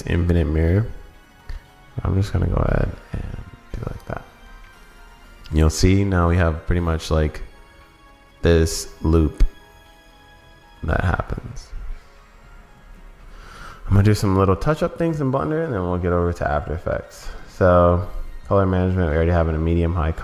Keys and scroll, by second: 13.8 super+s.